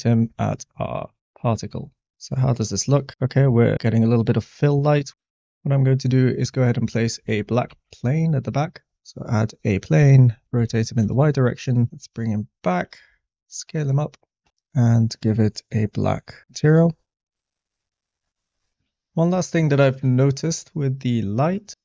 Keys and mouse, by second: 0.2 click, 0.8 middle click, 6.2 middle click, 6.9 middle click, 7.7 shift+a, 10.0-10.6 typing, 11.0 Return, 11.9 g, 11.9 x, 12.5 click, 12.9 s, 15.0 click, 15.9 click, 17.4 click, 18.7 shift+middle click.